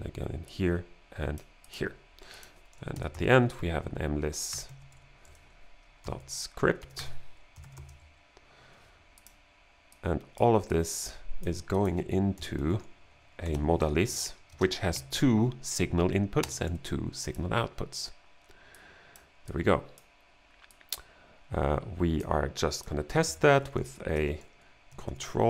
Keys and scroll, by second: 2.8-8.3 typing, 12.2-14.9 typing, 16.5 space, 16.6 2, 23.3-25.4 typing.